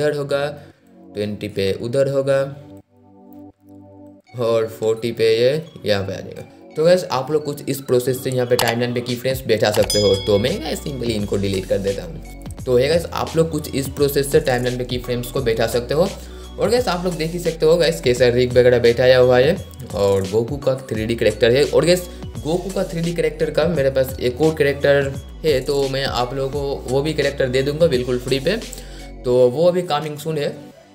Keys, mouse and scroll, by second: 18.5-18.9 scroll up 1, 19.1-19.5 scroll down 1.